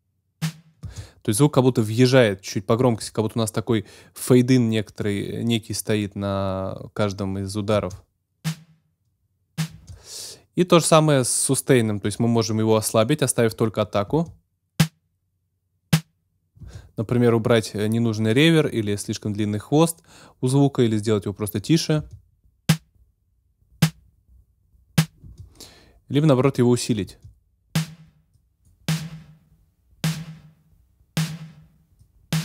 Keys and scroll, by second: 0.8 space, 7.7 space, 9.7 space, 14.0 space, 16.6 space, 22.0 space, 25.2 space, 27.0 space.